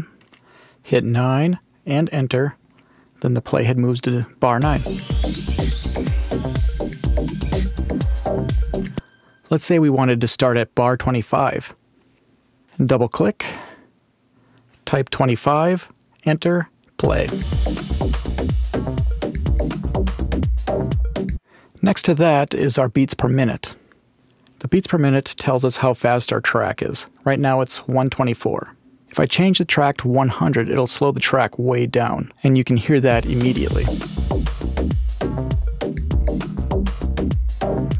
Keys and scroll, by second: 1.9 Return, 4.5 space, 8.8 space, 14.5-15.5 typing, 16.0 Return, 16.9 space, 21.2 space, 30.1-31.1 typing, 31.6 Home, 33.0 space, 37.8 space.